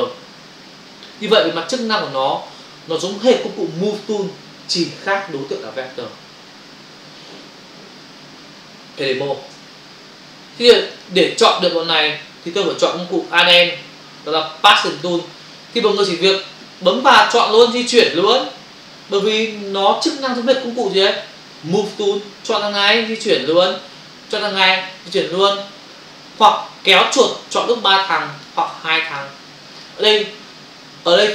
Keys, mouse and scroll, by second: 9.7 f, 10.9 click, 13.3 click, 17.1 click, 17.2 click, 18.0 click, 23.1 click, 24.8 click, 26.0 click, 27.1 click, 28.4 click, 28.5 click, 29.8 click.